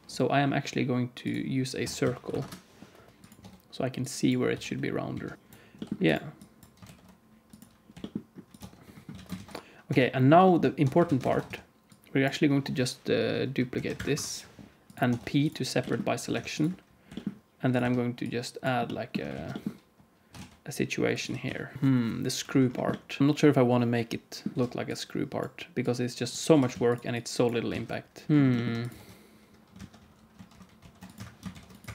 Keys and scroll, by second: 1.7 r, 3.3 Tab, 4.4 s, 5.3 ctrl+b, 5.7 g, 6.8 ctrl+b, 7.8 g, 8.5 Tab, 9.1 alt+a, 9.3 ctrl+s, 9.8 Tab, 10.7 Tab, 11.0 alt+a, 11.3 ctrl+s, 11.4 Tab, 13.7 shift+d, 14.0 p, 15.0 Tab, 15.7 g, 17.0 g, 17.7 Tab, 19.2 alt+z, 20.2 e, 21.2 g, 21.7 KP_1, 23.2 Tab, 23.2 alt+a, 23.2 ctrl+s, 24.5 Tab, 24.5 alt+z, 24.5 KP_1, 26.4 g, 27.6 alt+z, 28.1 g, 28.3 Tab, 28.3 alt+a, 28.3 ctrl+s, 28.3 KP_1, 28.9 Tab, 29.7 alt+a, 30.7 ctrl+r, 31.4 ctrl+r.